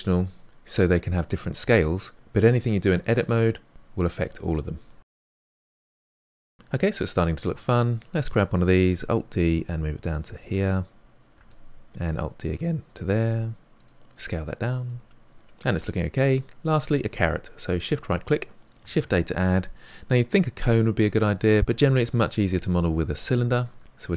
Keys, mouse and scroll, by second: 2.3 Tab, 3.0 g, 3.9 Tab, 5.0 g, 5.3 click, 5.4 g, 5.6-6.3 middle drag, 6.3 scroll down 2, 6.4-7.7 middle drag, 7.7 click, 8.2-9.1 middle drag, 9.1 alt+d, 13.2 s, 14.6-15.9 middle drag, 15.9-17.8 scroll up 2, 17.8 shift+right click, 18.8 shift+a.